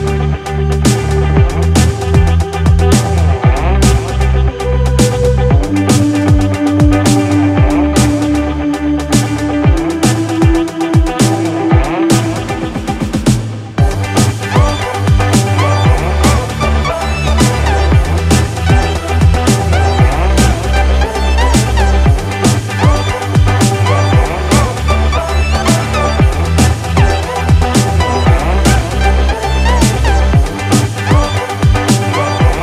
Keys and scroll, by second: 5.2 ctrl+z, 11.6 ctrl+z, 14.8 ctrl+z, 29.9 ctrl+z.